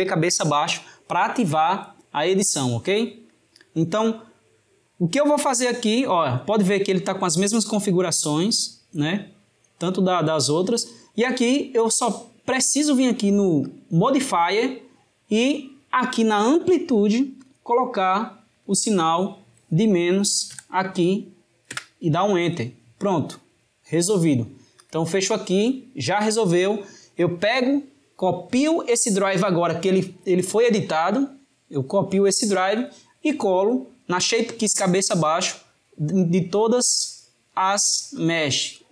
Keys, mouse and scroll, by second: 28.2-31.3 right drag, 33.1 click, 36.4-38.9 right drag.